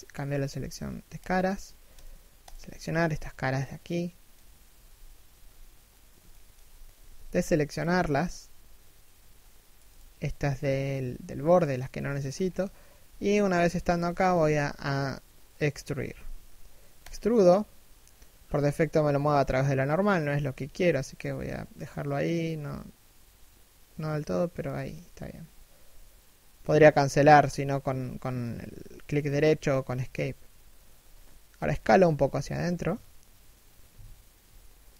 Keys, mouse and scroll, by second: 1.0 Tab, 1.5 alt+right click, 2.0 alt+shift+right click, 3.5 middle click, 4.3 3, 4.9 1, 5.9 alt+shift+middle click, 6.5 b, 11.6 alt+shift+middle click, 11.9 alt+shift+scroll down 1, 12.0-12.7 scroll up 1, 12.7 3, 13.1 1, 13.7 alt+shift+middle click, 15.7 e, 31.1 s.